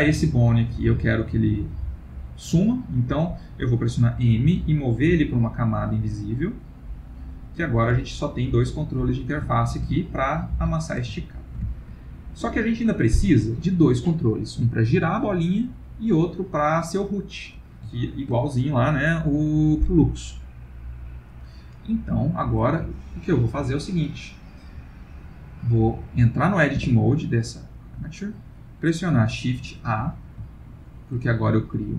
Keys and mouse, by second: 0.2 middle click, 2.2 middle click, 4.4 m, 6.5 middle click, 7.7 click, 7.9 g, 9.2 click, 9.5 g, 11.2 ctrl+middle click, 11.7 shift+middle click, 11.9 shift+middle click, 12.1 middle click, 18.0 ctrl+middle click, 26.8 Tab, 29.7 shift+a, 30.7 ctrl+middle click.